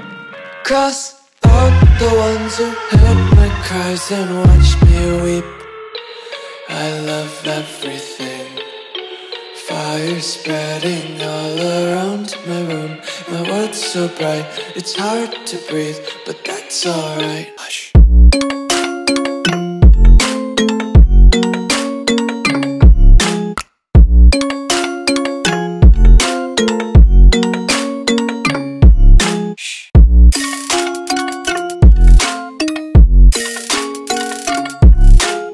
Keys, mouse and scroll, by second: 6.6-9.7 typing, 11.3-14.6 typing, 15.2 click, 20.0 click, 31.2 click.